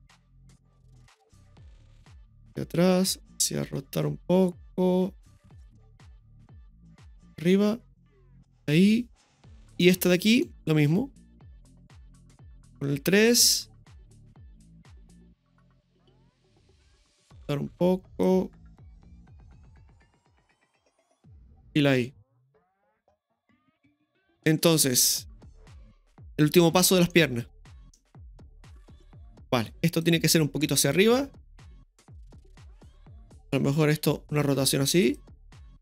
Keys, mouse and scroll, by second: 2.0 click, 3.6 r, 5.4 click, 6.4 click, 8.5 i, 9.8-10.4 middle drag, 11.4 right click, 12.7 KP_3, 15.4-16.4 drag, 17.7 r, 20.4 g, 22.0 g, 22.0 i, 23.3 middle click, 24.0-24.4 scroll down 1, 24.4-25.7 middle drag, 25.8 space, 26.1 click, 26.7-27.1 scroll up 1, 27.1-27.7 middle drag, 28.2 scroll down 1, 30.0 right click, 30.9 right click, 30.9-32.8 drag, 34.0 right click, 34.9 r.